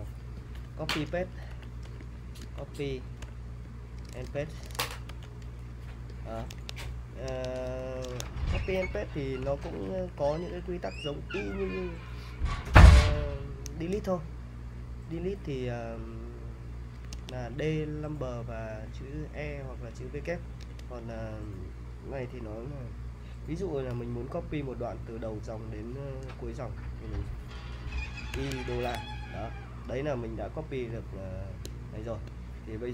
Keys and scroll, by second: 0.6 Return, 1.5-5.6 typing, 6.6 super+Tab, 7.3 super+Tab, 7.7 e, 8.1 super+Tab, 9.4-11.2 typing, 17.1 super+Tab, 20.6 super+Tab, 28.3-28.7 typing.